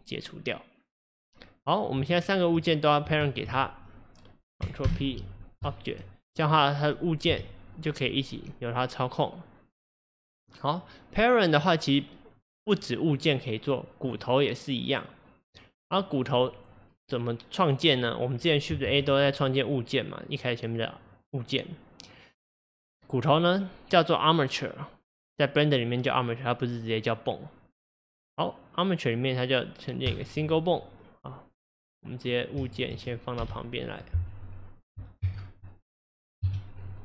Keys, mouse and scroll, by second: 2.2 shift+click, 3.2 shift+click, 4.9 ctrl+p, 6.2 click, 6.4 click, 7.3 g, 11.6 click, 14.1 click, 15.4 click, 16.0 click, 17.9 click, 18.9 shift+a, 31.9 click, 33.4 g, 34.8 click, 35.2 KP_0, 36.4 KP_Decimal.